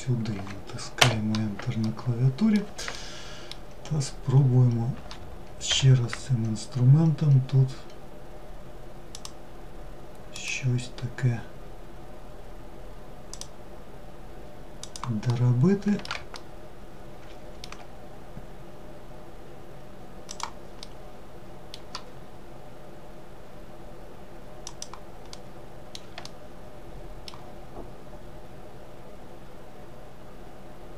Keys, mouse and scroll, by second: 1.4-3.9 middle drag, 3.9-5.3 scroll up 1, 5.3 k, 14.9-19.1 middle drag, 20.4-23.4 middle drag, 24.9-29.0 middle drag.